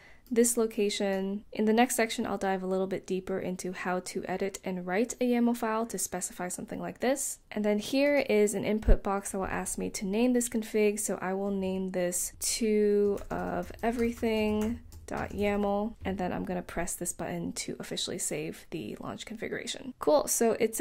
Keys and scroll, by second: 12.1-16.3 typing.